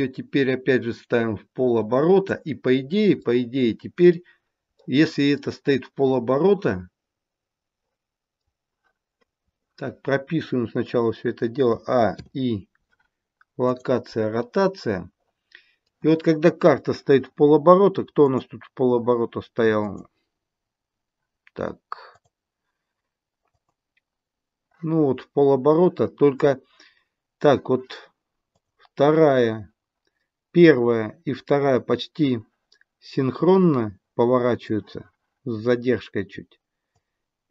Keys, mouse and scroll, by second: 3.1 middle click, 4.7 middle click, 6.2 middle click, 11.7 a, 12.1 i, 14.4 middle click, 18.3 click, 19.8 click, 22.1 click, 23.5 click, 28.5 click, 33.5 middle click, 36.9 click.